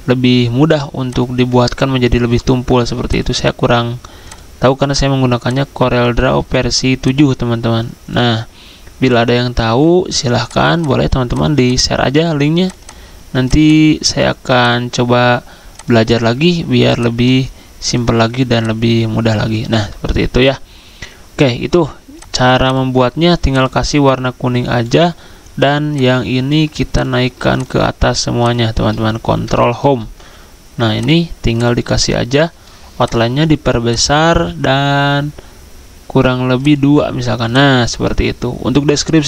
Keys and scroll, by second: 29.5 ctrl+Home.